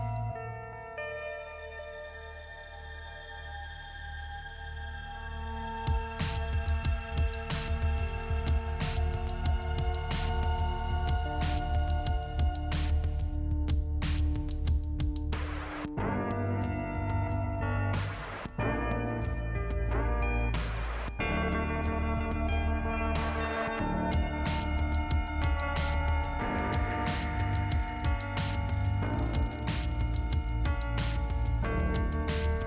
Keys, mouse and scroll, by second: 1.9 click, 3.1 middle click, 4.4 click, 7.0 click, 7.2 click, 7.3 double click, 8.1 middle click, 9.0-9.6 scroll down 1, 10.6 click, 12.5 click, 13.8-14.7 scroll up 2, 14.7 click, 16.6 click, 19.1 click, 21.7 click, 23.5 middle click, 24.1 click, 25.0 middle click, 26.4 click, 26.8 click, 26.8 double click, 30.6 click, 32.3 click.